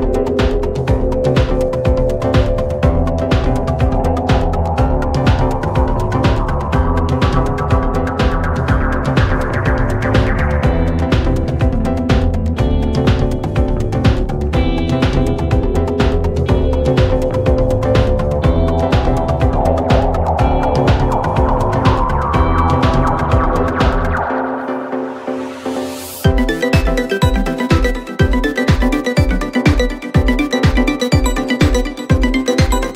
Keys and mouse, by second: 13.3 middle click, 15.7 middle click, 23.9 middle click, 26.1 middle click, 27.2 middle click, 27.6 middle click, 28.3 middle click, 28.6 middle click, 29.1 middle click, 29.5 middle click.